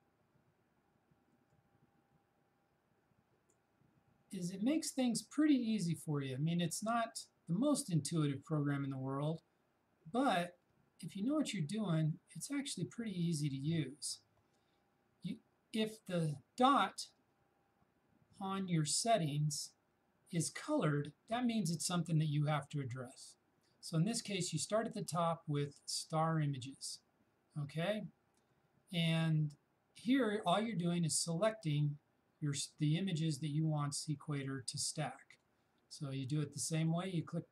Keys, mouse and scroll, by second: 1.6-16.4 drag, 2.2-3.7 drag, 25.7 click, 25.9 click, 33.0-37.5 drag.